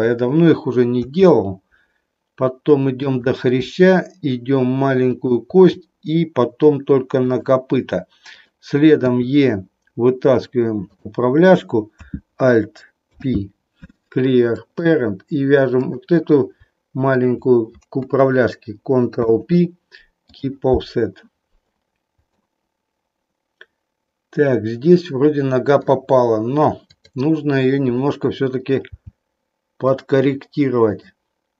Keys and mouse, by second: 0.9 e, 3.7 e, 5.2 click, 5.6 e, 8.3 click, 9.1 e, 10.8 click, 12.9 alt+p, 15.8 click, 17.1 shift+click, 19.1 ctrl+p, 22.3-25.8 middle drag, 28.9 g, 29.8 click.